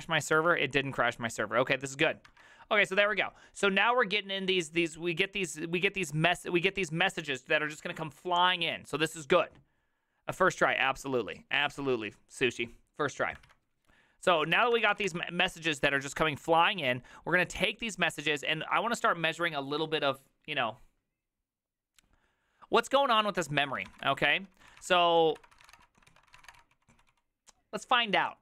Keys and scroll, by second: 0.2 ctrl+a, 0.4 3, 14.5-19.9 typing, 23.7-27.7 typing.